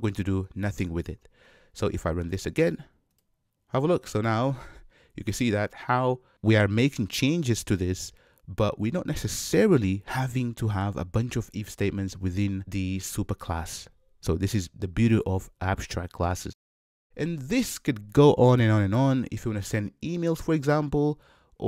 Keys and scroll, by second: 3.2 shift+F10, 6.3 shift+F10.